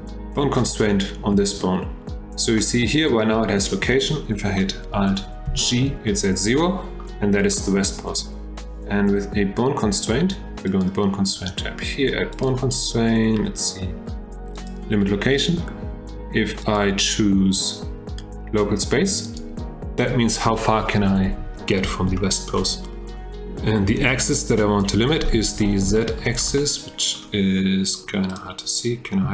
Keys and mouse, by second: 5.5 alt+g, 6.6 click, 7.5 shift+middle drag, 10.7 click, 12.5-14.7 drag, 16.8-19.4 drag, 22.2-22.5 shift+drag, 26.0 shift+drag, 26.5-27.1 middle drag, 28.3 click, 29.2 h.